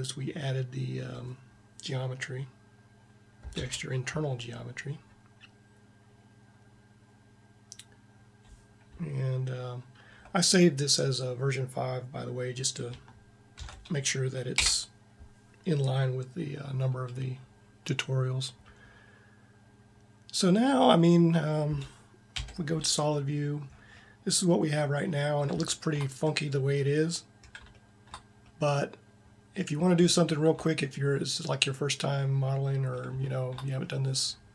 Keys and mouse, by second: 3.4 ctrl+Up, 13.5 ctrl+s, 22.1 z, 25.7-29.4 middle drag, 32.3-34.5 middle drag.